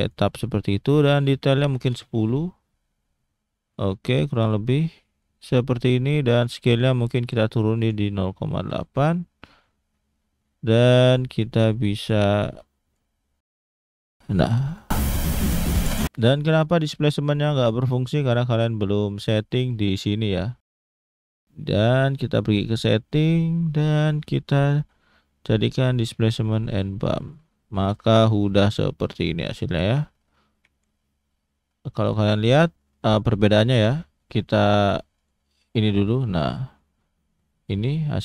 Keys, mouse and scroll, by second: 3.7 middle click, 4.7 middle click, 6.3 click, 9.4-9.9 scroll down 3, 9.9 middle click, 11.5 click, 12.4 click, 13.6 click, 14.6 click, 15.8 click, 18.2 click, 18.7-19.0 scroll down 2, 19.2 middle click, 19.7-20.1 scroll up 1, 20.9 click, 22.0-22.6 scroll down 1, 22.6 click, 22.9-24.5 scroll down 5, 24.5 click, 27.5-28.2 scroll up 2, 28.2 middle click, 32.1 middle click, 35.1 click, 36.0 middle click, 37.2-37.6 scroll up 2, 37.6 middle click.